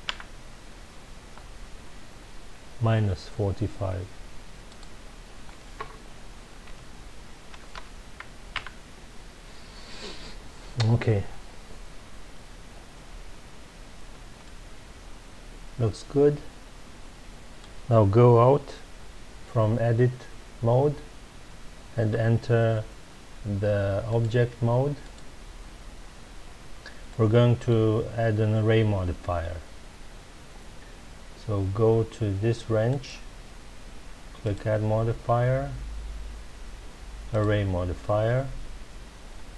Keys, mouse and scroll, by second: 0.1 KP_Enter, 4.6-7.7 drag, 8.6 KP_Enter, 12.6-13.5 scroll down 1, 14.4-17.5 middle drag, 17.6-18.8 scroll down 2, 21.9 Tab, 24.0-26.5 drag, 26.5-27.1 scroll down 1, 27.1-30.1 middle drag, 32.8 click, 34.4-37.4 drag.